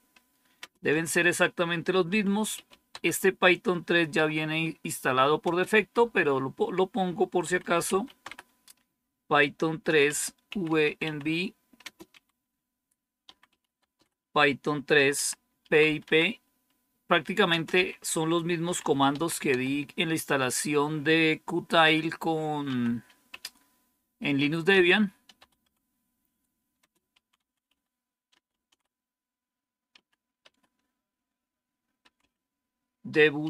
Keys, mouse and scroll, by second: 0.0-4.0 typing, 5.3-5.6 typing, 7.1-19.9 typing, 21.7-23.2 typing, 24.6-25.5 typing, 26.7-30.3 typing, 31.7-33.4 typing.